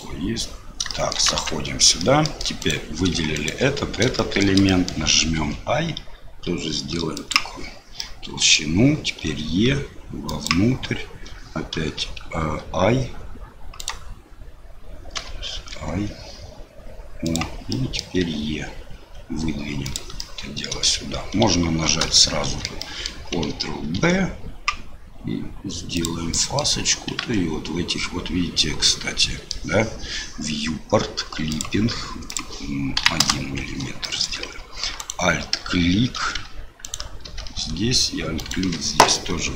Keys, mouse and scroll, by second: 0.9 shift+middle click, 1.2 Tab, 2.0 middle click, 2.6 click, 3.3 shift+click, 4.1 shift+middle click, 4.6 middle click, 8.1 click, 9.2 e, 11.7 o, 12.4 i, 15.1 o, 15.5 i, 17.8 click, 18.7 e, 20.3 click, 22.3 shift+middle click, 22.9 middle click, 23.9 ctrl+b, 26.4 click, 28.9 click, 29.0 middle click, 31.5 click, 32.4-33.6 drag, 34.1 shift+middle click, 34.6 alt+click, 36.1 2, 36.8 alt+click, 38.4 alt+shift+click.